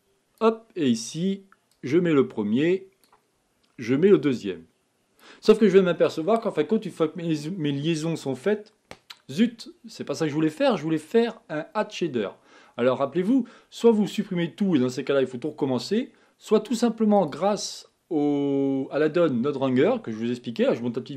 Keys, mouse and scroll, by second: 3.5 click, 17.4 click.